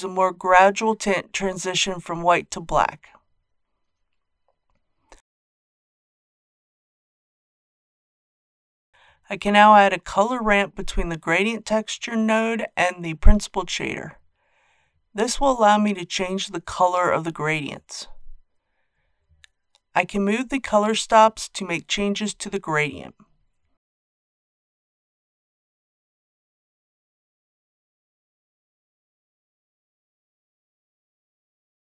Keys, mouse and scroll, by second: 5.1-8.6 drag, 11.1 shift+a, 13.1-31.9 drag.